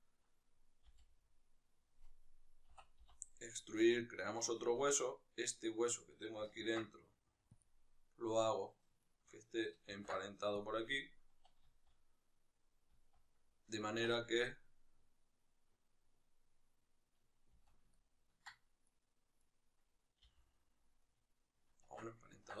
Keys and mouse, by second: 4.3 click, 5.1 right click, 6.3 ctrl+alt+s, 7.4 click, 8.8-10.4 shift+right drag, 10.4 ctrl+p, 12.2 z, 13.6-18.6 ctrl+middle drag, 14.2 Tab, 18.6-20.1 right drag, 20.1 g, 21.0 right click, 21.8 Tab, 22.0-22.6 ctrl+middle drag.